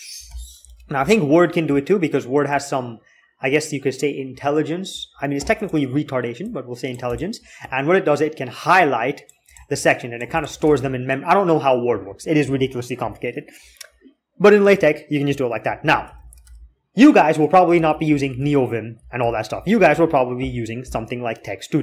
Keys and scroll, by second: 0.1 alt+x, 10.4 alt+Tab, 11.9 Escape, 15.9 alt+x, 16.2 alt+x, 17.6 alt+x, 17.8 alt+x, 19.0 alt+x.